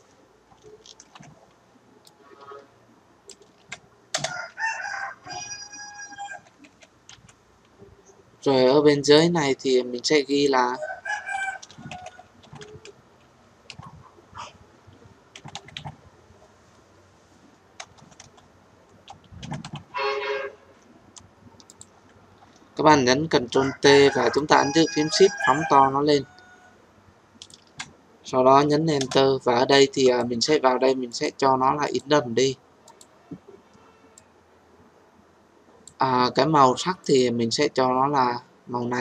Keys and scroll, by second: 1.0 ctrl+t, 4.1 Return, 23.3 ctrl+t, 29.0 Return.